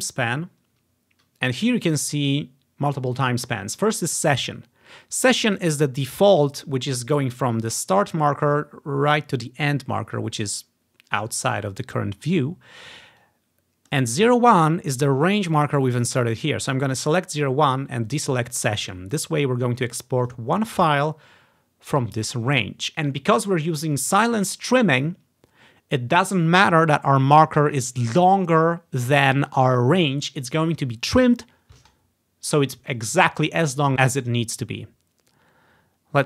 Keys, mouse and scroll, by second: 0.0-1.5 drag, 5.7-7.1 drag, 13.3 click, 17.1 click, 18.2 click, 19.5 click, 20.3-21.7 drag.